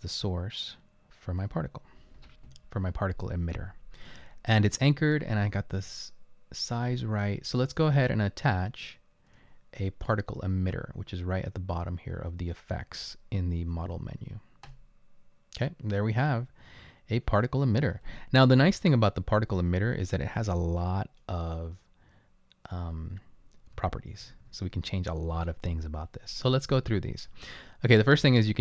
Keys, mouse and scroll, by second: 16.7 right click, 18.6-21.3 typing, 23.6-24.7 typing.